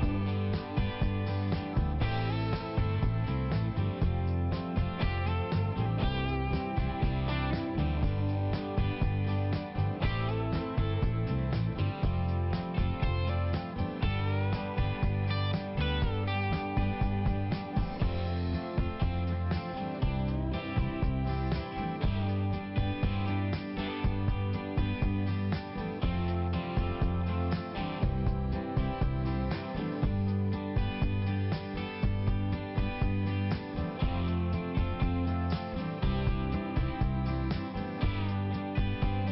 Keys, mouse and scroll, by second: 0.2 double click, 1.2 click, 1.5 click, 1.8 click, 2.4 double click, 2.8 double click, 3.3 click, 3.5 click, 3.7 click, 4.2 click, 4.3 click, 4.6 click, 4.8 click, 5.1 click, 5.2 click, 5.6 click, 5.8 click, 6.1 click, 6.2 click, 6.7 click, 7.2 click, 7.7 click, 7.8 click, 8.0 click, 8.2 double click, 8.4 double click, 8.5 double click, 9.5 click, 9.9 click, 10.5 click, 10.6 click, 11.0 click, 12.3 click, 13.8 click, 14.2 click, 14.3 double click, 15.2 double click, 15.4 double click, 15.7 click, 15.9 double click, 16.2 double click, 16.3 double click, 16.6 double click, 17.1 click, 17.2 click, 17.8 click, 19.2 click, 19.6 click, 20.2 click, 20.3 double click, 20.6 double click, 20.7 double click, 21.0 double click, 21.1 double click, 21.4 double click, 21.5 double click, 21.8 double click, 21.9 double click, 22.1 double click, 22.2 double click, 22.6 double click, 22.7 double click, 22.9 double click, 23.1 double click, 23.3 double click, 23.9 click, 23.9 click, 24.2 click, 24.3 double click, 24.6 double click, 24.8 double click, 25.0 double click, 25.2 double click, 25.4 double click, 25.5 double click, 25.8 double click, 25.9 double click, 26.2 double click, 26.3 double click, 26.4 double click, 26.8 click, 27.0 click, 27.2 click, 27.3 double click, 27.6 double click, 27.6 double click, 28.0 double click, 28.6 click, 28.7 click, 29.1 click, 29.2 click, 29.6 click, 29.7 click, 30.0 click, 30.2 click, 30.5 click, 30.6 click, 31.0 click, 31.1 click, 31.4 click, 31.5 click, 31.8 click, 31.9 double click, 32.1 double click, 32.3 double click, 32.5 double click, 33.0 click, 33.2 click, 33.5 click, 34.1 click, 34.2 click, 34.5 click, 34.7 double click, 34.9 double click, 34.9 double click, 35.2 double click, 35.3 double click, 35.9 double click, 36.0 double click, 36.3 double click, 36.9 click, 37.1 click, 37.5 click, 37.7 click, 37.9 click, 38.1 click, 38.6 click, 38.7 click, 39.1 click, 39.2 click.